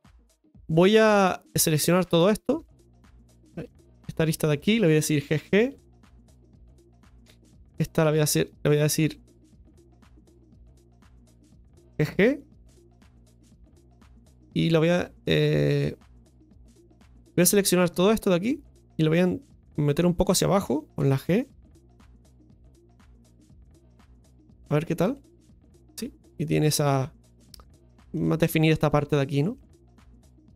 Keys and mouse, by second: 1.4 right click, 2.6 alt+shift+right click, 3.6 right click, 4.0 alt+shift+right click, 4.2 alt+shift+right click, 4.6 alt+shift+right click, 7.2 right click, 7.5 alt+shift+right click, 7.9 right click, 8.3 right click, 9.1 right click, 9.4 alt+shift+right click, 9.6 alt+shift+right click, 9.9 alt+shift+right click, 10.4 alt+shift+right click, 10.7 alt+shift+right click, 14.0-15.0 middle drag, 15.6 middle click, 17.5 right click, 17.9 shift+right click, 18.5 shift+right click, 19.6 middle click, 21.4 g, 23.2 middle click, 25.0 click, 25.3 Tab, 26.1-26.7 middle drag, 29.5-30.5 middle drag.